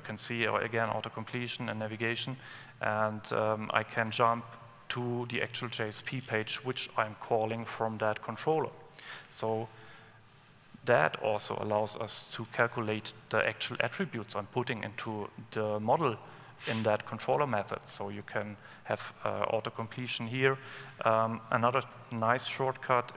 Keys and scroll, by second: 12.7 ctrl+space, 20.8 Escape.